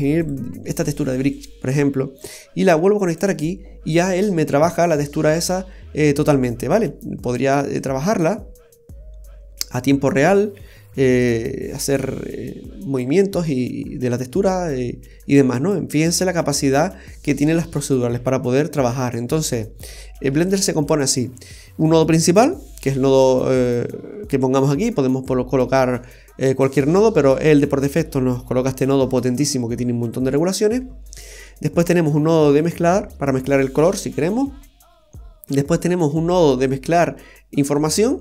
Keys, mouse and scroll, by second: 1.4 typing, 2.2 click, 4.8-6.1 scroll down 3, 5.2 middle click, 7.8 click, 11.2 click, 13.3-13.8 scroll down 3, 13.6 scroll up 1, 14.3 middle click, 14.3-14.7 scroll up 6, 15.2 scroll up 1, 16.8-17.7 scroll down 5, 18.3 scroll down 1, 19.3-19.6 scroll down 1, 19.6 middle click, 31.0-31.5 scroll up 2, 31.4 middle click, 32.2-32.6 scroll up 2, 35.1-36.3 scroll up 3, 35.4 middle click.